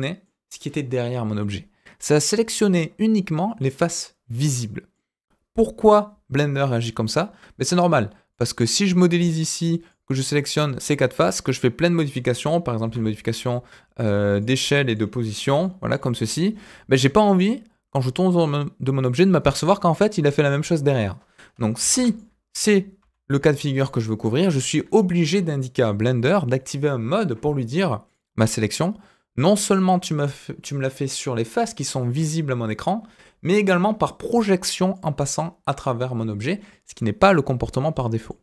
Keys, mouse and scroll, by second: 4.9-6.0 middle drag, 7.0 KP_1, 7.9-8.3 scroll up 2, 8.3 click, 9.1 click, 11.0 scroll down 1, 12.8 s, 14.5 middle click, 15.4 g, 16.1 middle click, 16.8-17.2 scroll down 1, 17.2-19.0 middle drag, 21.8 ctrl+z, 22.1 middle click, 23.0 ctrl+z, 23.5 middle click, 25.2 KP_1, 26.0 scroll up 2, 28.0 click, 28.6-34.9 drag, 35.7 middle click, 37.2-37.7 scroll down 2, 37.7 middle click.